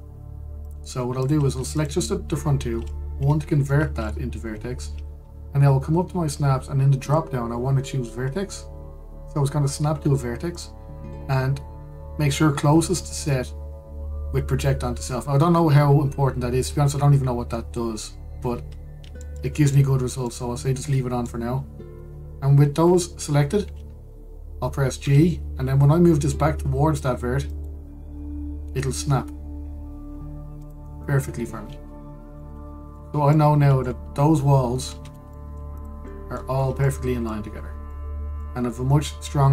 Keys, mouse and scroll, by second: 1.3 click, 2.4 shift+click, 3.8 1, 4.3-7.7 middle drag, 7.7-10.9 drag, 19.5 scroll up 1, 19.9 shift+middle click, 20.6-20.9 scroll down 1, 20.9-22.4 middle drag, 22.4-23.1 scroll up 1, 25.7 g, 29.2 g, 31.9-33.0 scroll down 1, 33.0-35.7 middle drag, 35.7 Tab, 36.0 middle click, 36.4 click, 36.7-37.2 middle drag, 37.2-37.5 scroll up 2, 37.5-39.5 middle drag.